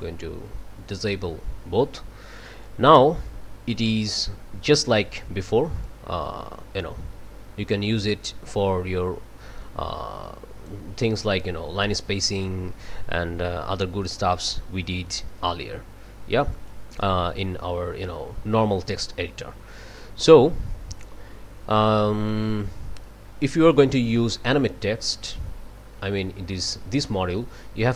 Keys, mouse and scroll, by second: 1.0 click, 5.8-10.9 drag, 12.4-16.9 drag, 16.5 right click, 18.9 click, 23.7 click.